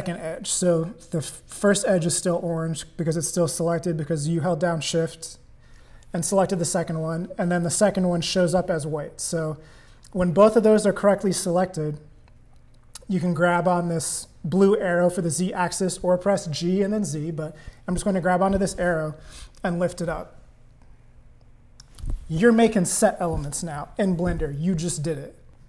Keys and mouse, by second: 17.8-21.8 drag, 25.5 click.